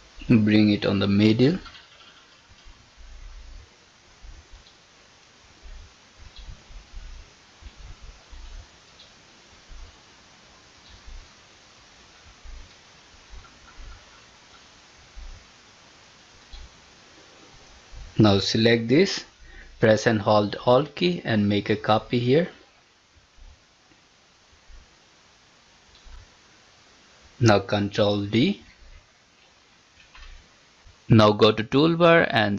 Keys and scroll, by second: 27.2 ctrl+d.